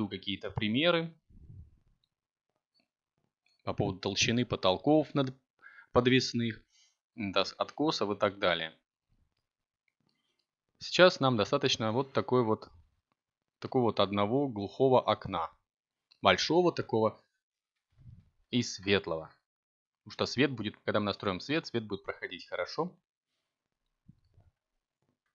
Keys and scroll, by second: 5.2 a, 8.9 ctrl+t, 10.7 Tab, 23.1 z.